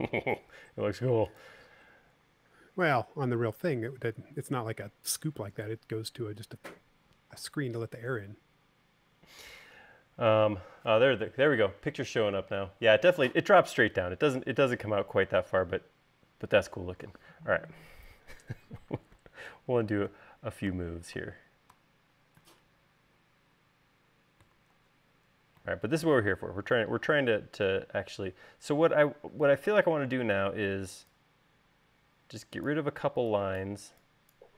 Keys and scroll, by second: 19.5 super+z, 25.1 super+z, 30.4 e.